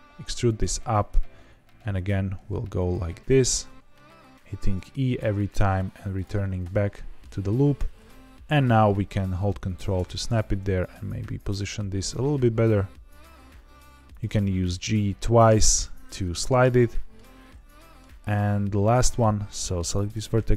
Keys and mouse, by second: 0.4 click, 1.0 e, 1.9 click, 2.0 e, 2.7 click, 2.9 e, 4.6 click, 5.1 e, 6.1 click, 6.3 middle click, 7.7 g, 9.6 ctrl+click, 10.5 g, 11.4 g, 11.6 g, 12.2 g, 14.0 click, 14.2 g, 14.4 g, 15.4 click, 16.7 middle click, 17.7 middle click, 18.8 click, 19.9 middle click.